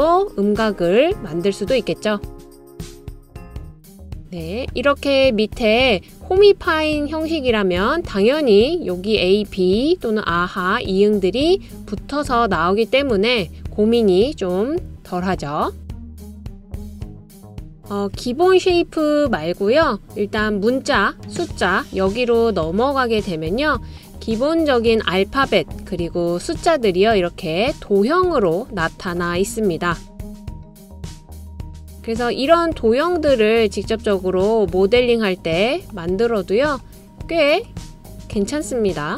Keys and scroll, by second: 13.9 typing, 15.1-15.9 typing, 17.5 BackSpace.